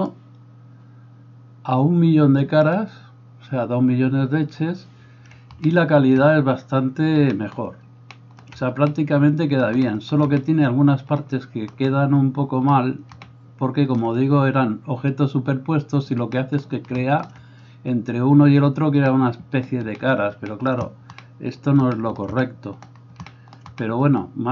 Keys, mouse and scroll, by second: 1.5-24.5 middle drag.